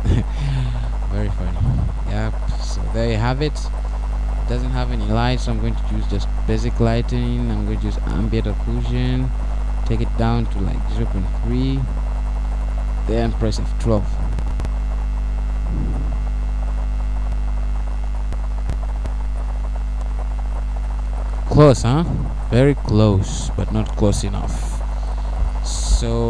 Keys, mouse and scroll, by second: 0.8-2.5 scroll up 2, 2.5 ctrl+alt+KP_0, 9.8 click, 11.6 click, 13.0 click.